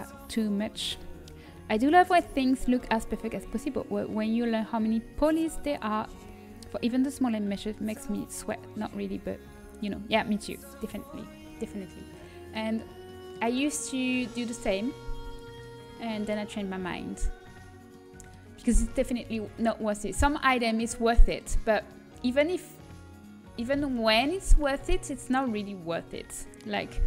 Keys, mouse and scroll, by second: 12.0-15.4 middle drag, 15.4-17.4 right drag, 17.4 middle click, 20.7 a, 24.6 a.